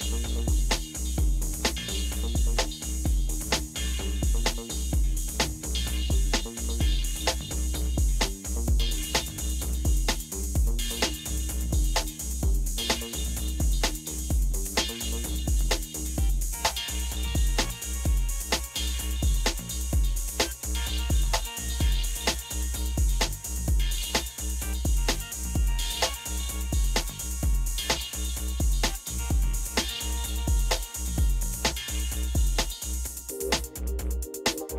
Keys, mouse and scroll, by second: 0.7-3.4 Up, 4.6 Up, 4.6 space, 6.5 space, 7.5 space, 8.1 space, 15.3 Tab, 15.3 space, 15.9 Right, 15.9 BackSpace.